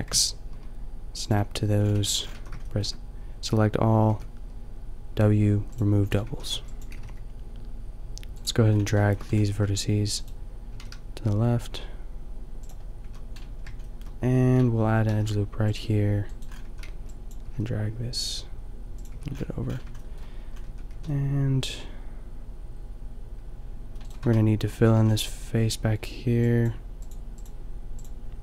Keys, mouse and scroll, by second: 1.3-2.9 drag, 1.9 a, 2.4 a, 4.1 w, 6.2 a, 6.5 b, 6.9 g, 8.1 click, 8.7 middle click, 9.5 g, 10.3-12.6 drag, 10.8 g, 12.7-15.1 drag, 13.1 a, 15.1 ctrl+r, 16.4 click, 16.7 a, 17.0 b, 17.4 g, 19.1 a, 20.6 Tab, 21.0 a, 24.1 click, 24.2 Tab, 24.4-26.1 drag, 24.8 a, 25.0 a, 26.1 middle click.